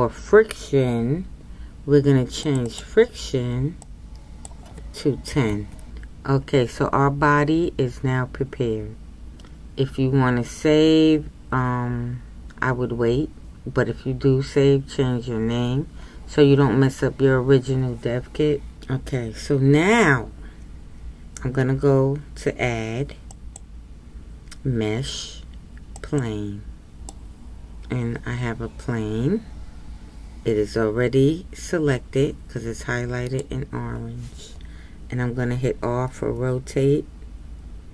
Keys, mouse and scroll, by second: 9.3-13.2 scroll down 2, 26.2 click, 27.1-30.1 middle drag.